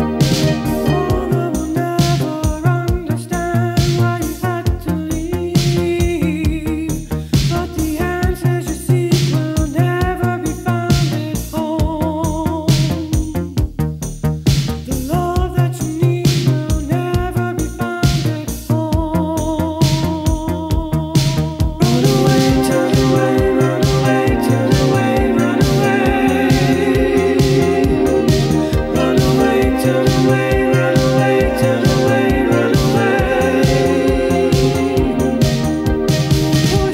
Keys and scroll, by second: 7.2-16.9 typing, 22.9-24.1 typing, 26.0-27.2 typing, 28.8-30.1 typing, 32.1 4, 32.9 ., 35.0-36.3 typing.